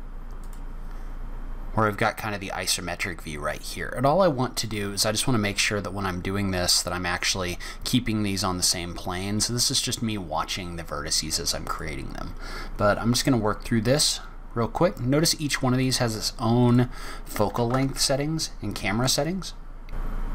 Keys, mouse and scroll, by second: 0.3 click, 1.0-1.9 scroll up 3, 1.9 scroll down 1, 3.7-4.4 scroll down 1, 8.3-8.9 scroll up 2, 9.4 scroll down 1, 11.6 click, 12.2 scroll down 2, 12.4-14.0 scroll up 7, 14.0-14.6 scroll down 2, 14.3-14.6 scroll up 1, 15.7 click, 16.6 click, 19.9 click, 20.0 shift+click, 20.2-20.3 typing.